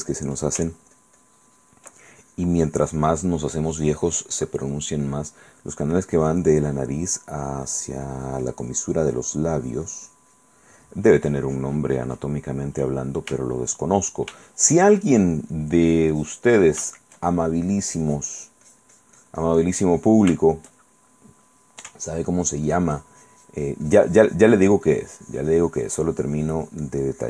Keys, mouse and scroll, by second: 0.1-5.1 ctrl+drag, 7.3-10.8 drag, 11.0-12.6 drag, 12.7 middle click, 13.6 shift+middle click, 14.6 shift+middle click, 15.9-17.0 drag, 17.0 shift+middle click, 18.2-20.5 shift+drag, 20.6 shift+middle click, 22.5-27.2 ctrl+drag.